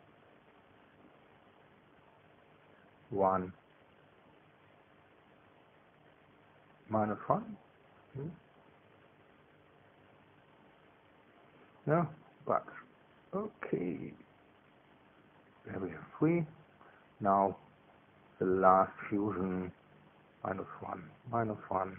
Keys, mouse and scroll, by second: 0.5 BackSpace, 1.0 Delete, 1.5 Delete, 2.4 KP_1, 2.5 Tab, 3.3 KP_Subtract, 5.6 Tab, 6.9 Caps_Lock, 7.7 click, 8.9-11.3 typing, 11.8 Return, 13.4 space, 14.4-16.8 drag, 18.3 click, 19.5 click.